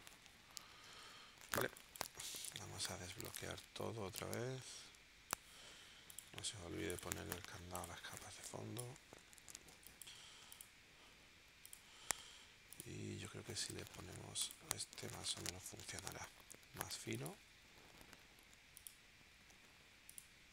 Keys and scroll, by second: 1.6 space, 2.2 v, 9.7 space.